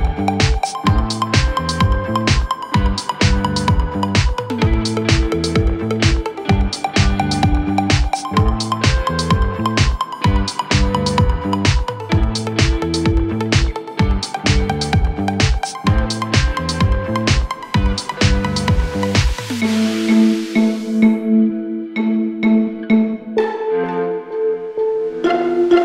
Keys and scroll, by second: 7.5 F3, 7.9 Escape, 9.1 Delete, 10.0 shift+F2, 10.4 Escape.